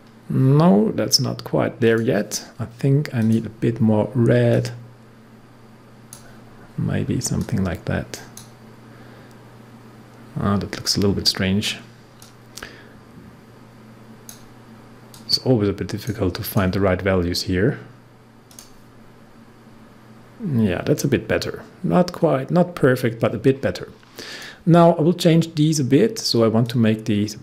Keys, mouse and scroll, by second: 1.8-10.9 drag, 12.1-16.4 drag, 21.1 scroll up 1, 22.5 scroll down 1, 24.2 click, 24.7 scroll down 1, 26.6 click.